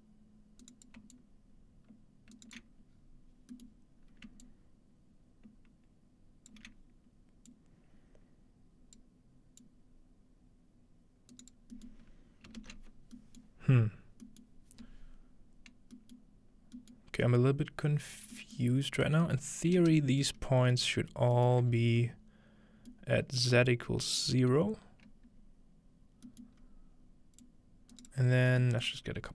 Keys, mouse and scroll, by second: 0.6 right click, 1.1-2.6 shift+drag, 2.4 shift+right click, 2.9 scroll down 2, 3.7-6.5 shift+middle drag, 4.4-12.8 shift+drag, 11.3-12.8 right drag, 13.0-13.6 scroll down 1, 14.8-16.0 scroll down 2, 17.4-18.4 middle drag, 18.6-19.1 middle drag, 19.3-19.7 middle drag, 21.7 scroll up 2, 21.9 alt+middle click, 23.2 middle click, 23.8-25.9 middle drag, 27.8 click, 27.8 middle click, 28.2-28.6 scroll down 3, 29.1 scroll up 4.